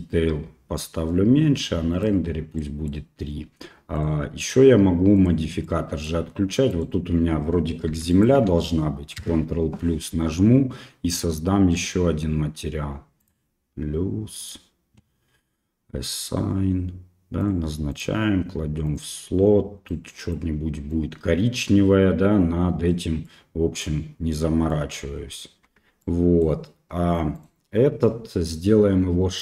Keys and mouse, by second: 1.9 click, 2.6 middle click, 4.0 click, 4.4 click, 5.2 click, 5.7 middle click, 6.7 right click, 7.9 3, 8.1 right click, 9.2 ctrl+KP_Add, 13.3 click, 14.5-17.5 drag, 18.0-23.3 drag, 23.3 middle click, 24.3 middle click, 25.7 Tab, 26.0 middle click, 27.4 right click.